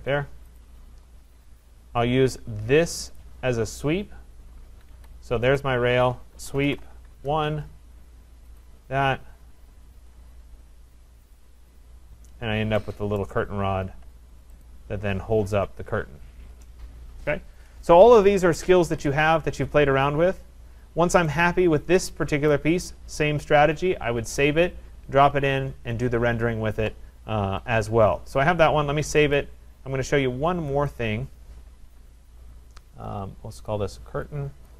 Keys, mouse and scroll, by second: 0.6 click, 1.1-2.1 scroll, 3.2 click, 4.9 Escape, 5.6 click, 6.4-7.2 typing, 8.6 click, 9.4 Return, 9.9 Return, 11.4 click, 12.0-13.0 scroll, 13.2 right click, 14.0-14.6 scroll, 14.6 click, 15.2-16.4 scroll, 19.0 click, 19.2 click, 19.7-20.3 scroll, 20.3 scroll, 21.3 scroll, 22.5 right click, 29.4 click, 30.9 click, 33.7 click, 34.7 click.